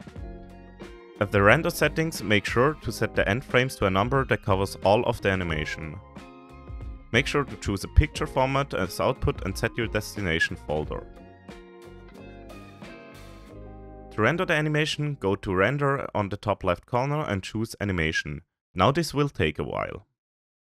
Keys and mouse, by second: 1.0 click, 1.3 click, 3.2-5.0 drag, 4.9 0, 8.1 click, 11.1 drag, 14.7 ctrl+s, 15.9 ctrl+s, 18.8 click, 20.4 ctrl+s.